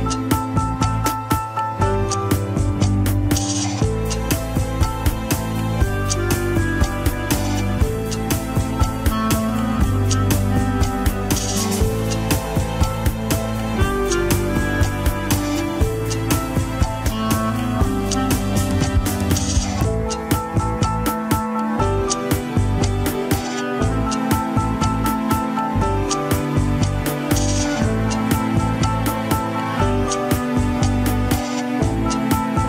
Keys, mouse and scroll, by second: 0.9 middle click, 1.5 alt+z, 1.9 click, 2.7 alt+z, 3.3 middle click, 3.8-6.5 drag, 6.5 scroll down 2, 6.5 KP_1, 6.8 ctrl+Tab, 7.6 ctrl+s, 7.8 shift+z, 8.1-10.4 middle drag, 10.4 click, 10.7 KP_3, 10.9 scroll down 1, 11.6 ctrl+Tab, 12.0 a, 12.7 alt+g, 13.0 shift+middle drag, 13.3 scroll up 1, 14.2 click, 15.0 r, 17.8-18.3 drag, 18.6 r, 19.9 click, 20.4 scroll up 3, 21.1 r, 23.5 scroll down 1, 24.0-24.4 scroll up 4, 24.4 scroll down 1, 25.3 a, 25.7 alt+r, 26.0 alt+g, 26.3 click, 27.3 r, 29.4-29.8 scroll up 3, 29.8 ctrl+Tab, 29.9 shift+click, 30.2 ctrl+Tab, 30.8 alt+z, 31.7 ctrl+click, 31.8 alt+z, 32.1-32.6 middle drag.